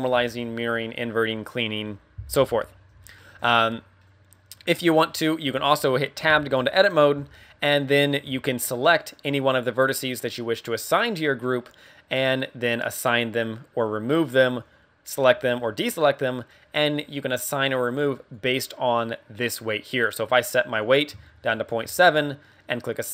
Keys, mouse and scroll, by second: 3.1 shift+middle click, 3.6-4.0 scroll down 3, 4.0 middle click, 4.7 middle click, 6.3 Tab, 7.1 a, 7.8 middle click, 8.2 a, 8.9 right click, 18.3 click, 20.3 click, 22.5 scroll up 3.